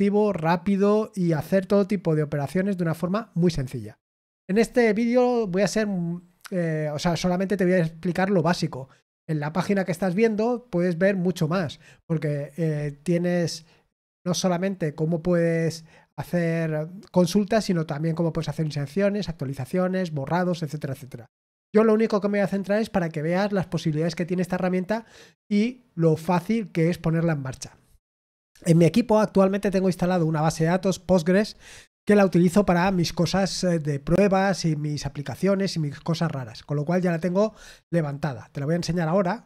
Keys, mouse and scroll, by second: 13.8-14.2 scroll down 4, 38.9 click.